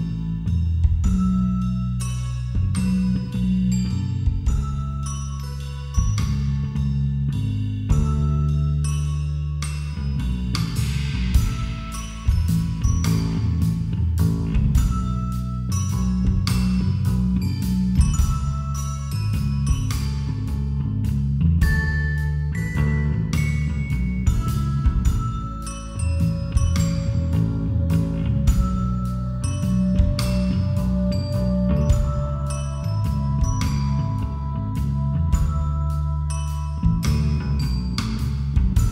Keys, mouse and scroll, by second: 0.2 b, 1.0 a, 1.5 z, 1.8 middle click, 3.7-5.5 typing, 6.2 Escape, 6.9 z, 7.3 a, 7.6 z, 9.1 middle click, 9.8 KP_5, 9.9 KP_1, 10.6 z, 12.6 ctrl+r, 15.1 a, 15.8 ctrl+r, 18.7 a, 19.0 z, 20.9 KP_5, 21.1 KP_1, 21.2 KP_5, 21.9 ctrl+r, 23.6 a, 24.2-25.5 middle drag, 25.5 KP_5, 25.8 KP_1, 26.0 KP_5, 26.3 z, 27.6 b, 29.0 g, 30.0 a, 30.3 z, 30.7-31.7 middle drag, 32.6-33.6 drag, 33.6-34.7 middle drag, 33.8 click, 34.7-36.8 right drag, 36.8 middle click, 37.0-38.3 right drag, 37.6 f.